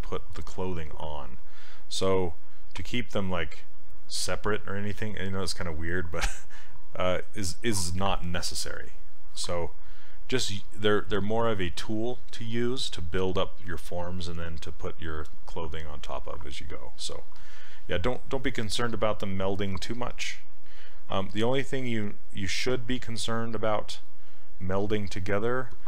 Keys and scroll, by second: 19.7 s.